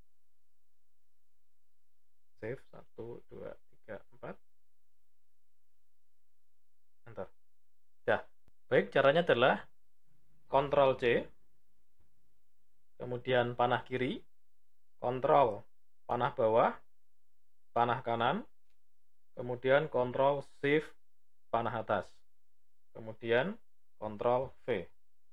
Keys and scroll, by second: 10.3 ctrl+c, 12.9 Left, 14.8 ctrl+Down, 17.6 Right, 19.8 ctrl+shift+Up, 23.7 ctrl+v.